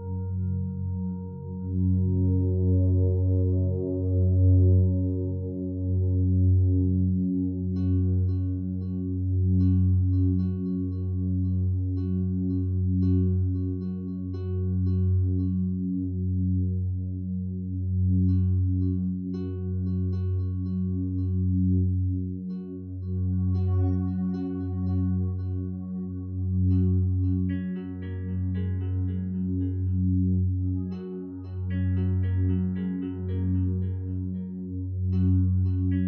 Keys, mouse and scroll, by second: 8.3 Escape, 12.1 5, 12.3 Return, 18.3 Escape, 23.4 Escape, 31.4 Escape.